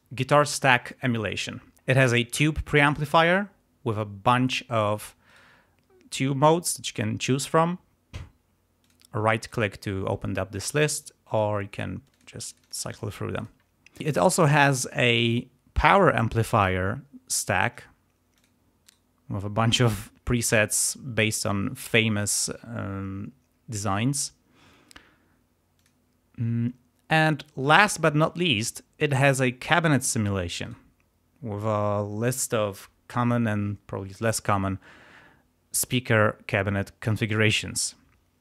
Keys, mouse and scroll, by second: 1.7 click, 3.2 click, 5.2 right click, 8.8 click, 9.3 right click, 10.5 click, 11.2 click, 11.6 click, 12.0 click, 12.4 click, 13.3 click, 16.6 click, 17.6 click, 18.3 click, 18.7 right click, 25.7 click, 30.6 right click.